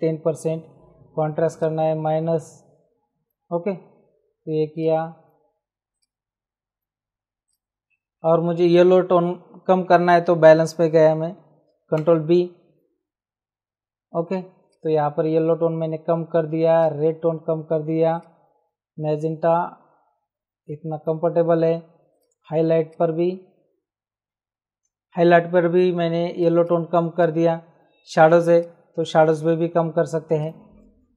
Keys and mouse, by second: 1.6 click, 4.7 click, 5.9 click, 7.4 click, 11.8 ctrl+b, 14.6 click, 16.7 click, 18.1 click, 22.1 click, 26.0 ctrl+space, 26.3 click, 26.5 click, 27.1 click, 28.0 click, 28.5 click, 30.4 click.